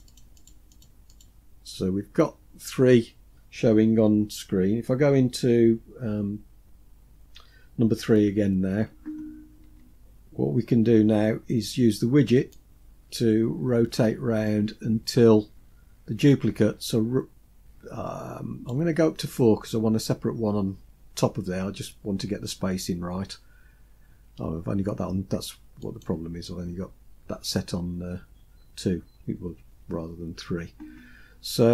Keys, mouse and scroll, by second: 0.2 click, 0.4 click, 0.8 click, 1.2 click, 8.3 KP_3, 9.7-10.9 scroll up 6, 12.6-18.8 drag, 25.8 click.